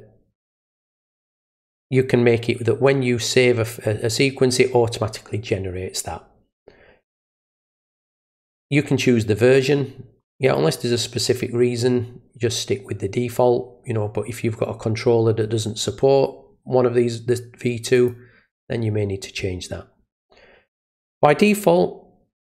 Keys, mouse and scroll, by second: 7.9 click, 10.4 click, 17.9 click.